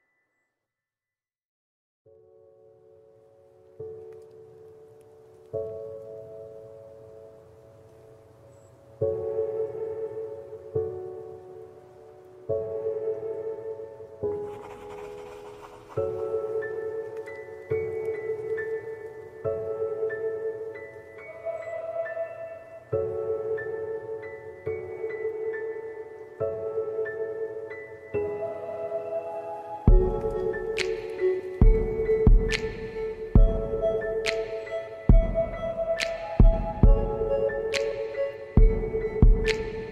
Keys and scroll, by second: 38.3 shift+l.